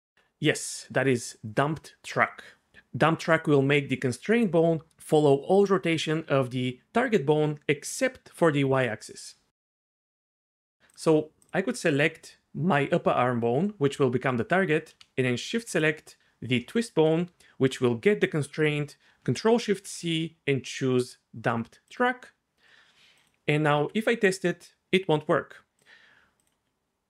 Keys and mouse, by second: 10.1 click, 10.5 click, 10.9 click, 15.7 shift+click, 19.7 ctrl+shift+c, 22.0-23.3 drag, 23.7 r, 25.8 drag.